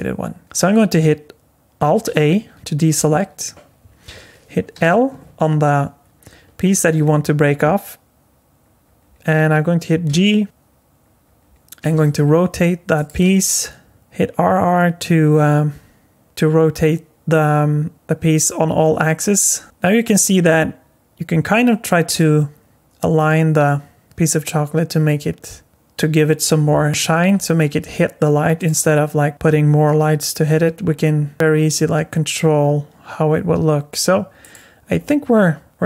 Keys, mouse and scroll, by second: 2.0 alt+a, 4.7 l, 10.1 g, 11.8 r, 13.2 r, 14.0 r, 27.3 r, 28.7 r, 29.3 r, 34.9 r, 35.7 r.